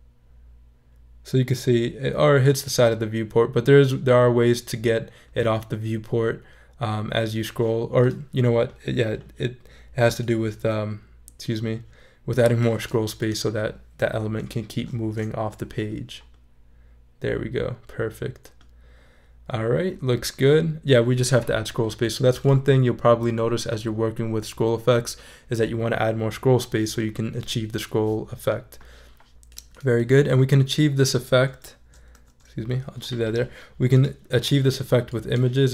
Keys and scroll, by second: 15.0 shift+super+e, 32.1 super+z.